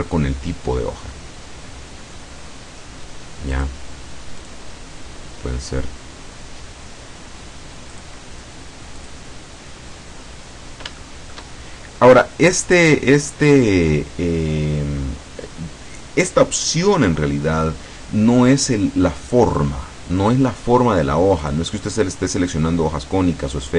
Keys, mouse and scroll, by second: 0.1-0.5 scroll up 1, 0.9 scroll down 1, 2.2-3.6 scroll down 1, 3.6 click, 4.5 click, 5.8 scroll up 1, 8.0 click, 9.1 click, 10.3-10.8 scroll down 1, 10.8 scroll down 1, 11.1 shift+middle click, 17.7-18.0 scroll up 1, 18.2-18.7 scroll up 3, 21.5 click.